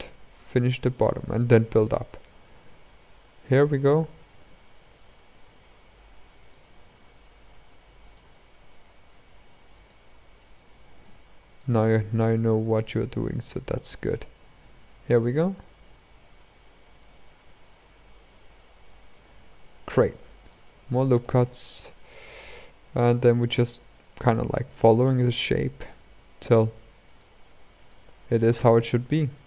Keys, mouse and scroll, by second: 0.3 alt+click, 1.9 e, 4.1 s, 6.6 e, 7.9 s, 10.2 scroll up 1, 11.1 shift+middle click, 11.5 scroll up 1, 22.6 click, 25.0-26.1 middle drag.